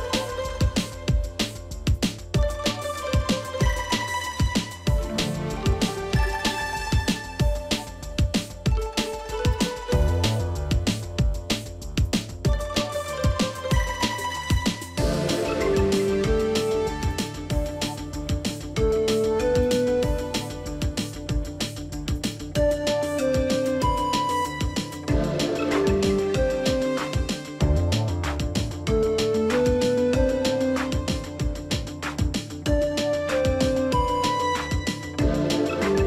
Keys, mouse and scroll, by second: 0.2 right click, 25.1 right click.